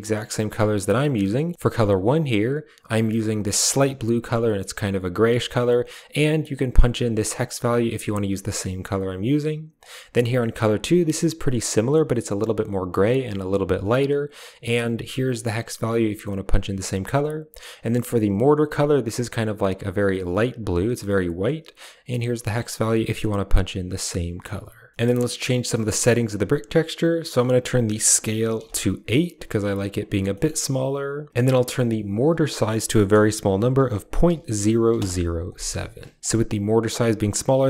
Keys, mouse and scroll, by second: 1.2 middle click, 1.8 click, 10.4 click, 14.5 click, 18.2 click, 25.6 middle click, 27.2-28.5 drag, 30.2 middle click, 32.0-34.9 drag, 34.3 0, 36.2-37.6 shift+drag.